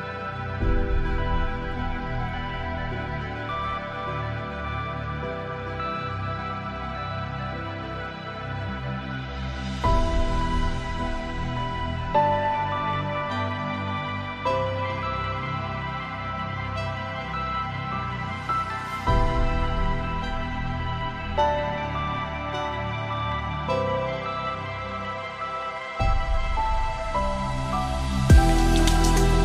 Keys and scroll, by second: 24.7 ctrl+space, 27.3 ctrl+;, 28.2 ctrl+space.